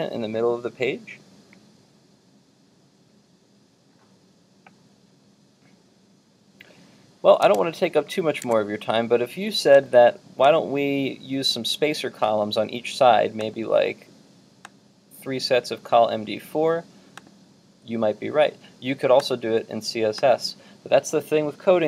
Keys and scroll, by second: 7.5 super+Tab, 8.5 super+Tab.